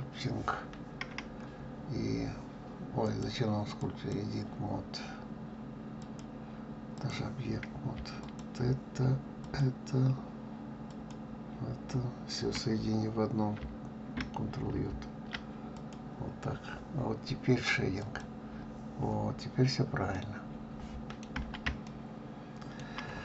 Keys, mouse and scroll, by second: 1.8-2.2 scroll down 3, 4.1-8.0 drag, 9.5 shift+click, 11.1 shift+click, 14.7 ctrl+j, 15.8 click, 17.8 click, 20.3-23.2 middle drag.